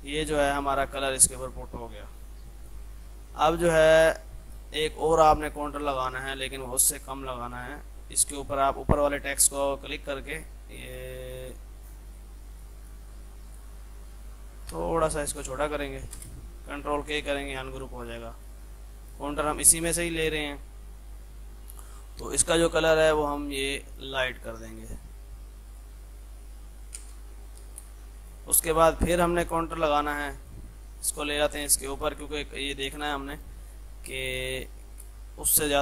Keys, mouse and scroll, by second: 0.0-0.6 typing, 0.7-2.6 drag, 4.1 F2, 4.3-16.0 drag, 16.0 F3, 16.2 space, 17.0 ctrl+k, 17.4 click, 19.6 ctrl+z, 21.9 F3, 22.2-23.9 drag, 27.0 space, 27.5 F3, 27.8 F2, 27.8-29.8 drag, 29.8 F3, 30.2 click, 31.6-32.4 typing, 32.1 click, 33.1 F2, 33.2-35.8 drag.